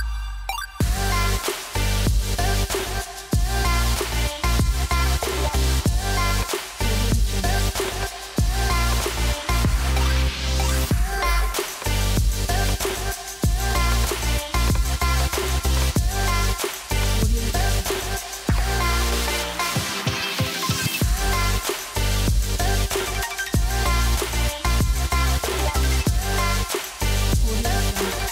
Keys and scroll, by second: 19.0 0, 23.8 0.